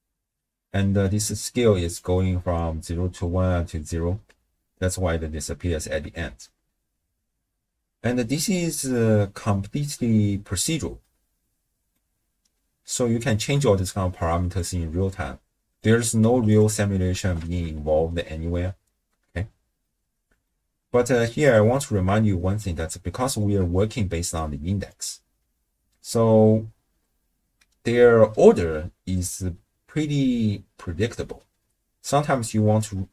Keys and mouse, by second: 0.7 middle click, 1.8-2.6 drag, 4.3 shift+space, 6.3 shift+space, 7.7 space, 8.2 shift+space, 9.3 space, 9.8 space, 10.2 space, 11.1 click, 11.7 click, 14.7-15.8 drag, 15.9 click, 17.2 shift+space, 19.4 space, 20.0-20.5 drag, 21.4 click, 22.3 shift+click, 22.5 shift+middle click, 23.2 middle click, 24.1-25.5 d, 24.5 click.